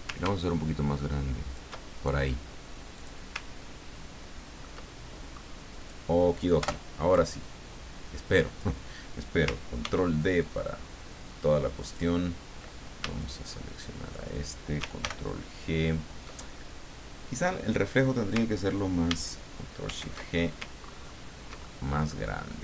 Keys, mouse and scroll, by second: 0.4-1.6 ctrl+shift+drag, 2.9 click, 3.5-4.5 ctrl+scroll down 4, 4.6 ctrl+middle click, 5.8 click, 6.6 Delete, 7.4-8.8 drag, 9.8 ctrl+d, 10.4-12.1 ctrl+drag, 13.2-14.3 shift+drag, 15.0 ctrl+shift+g, 19.8 ctrl+shift+g, 20.8-21.4 ctrl+scroll up 2, 21.6 ctrl+middle click, 22.3 ctrl+middle click.